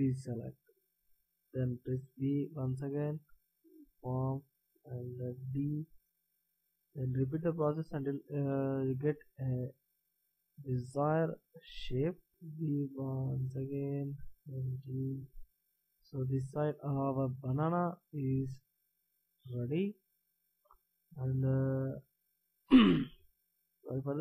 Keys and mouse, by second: 1.8 b, 2.0 click, 4.0 g, 6.0 a, 6.8 b, 9.3 g, 11.6 a, 12.3 b, 14.3 g, 15.7 a, 22.6 middle click, 22.7 click, 23.0 click.